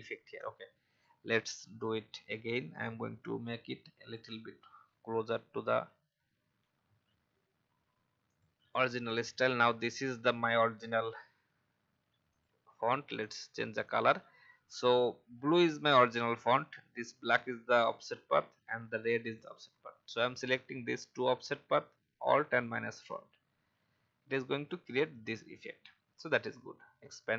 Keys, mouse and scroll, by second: 0.9 click, 1.5 alt+scroll up 1, 2.7-5.1 drag, 5.5 alt+scroll down 1, 6.7 alt+scroll up 1, 8.3 click, 9.3-9.6 alt+scroll down 1, 12.2 click, 15.7 alt+scroll up 1, 17.3 click, 19.2 shift+click, 22.5 alt+click, 23.7 alt+scroll down 1, 24.8 alt+scroll down 1, 26.1-27.3 drag.